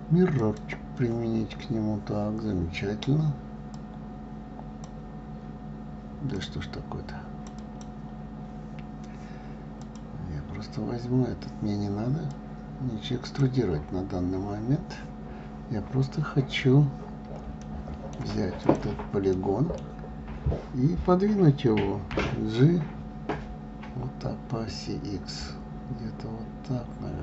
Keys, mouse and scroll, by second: 4.1-8.2 drag, 10.2 click, 12.7-15.7 drag, 18.0-19.0 middle drag, 19.0 click, 19.7-22.5 middle drag, 22.5 g.